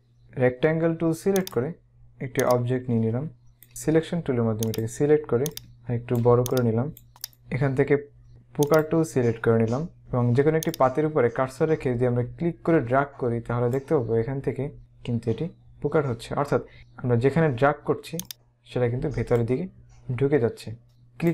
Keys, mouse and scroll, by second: 0.2 right click, 1.5 click, 4.6 click, 6.4 click, 7.3 right click, 8.8 click, 10.8 click, 18.3 click, 20.8 click.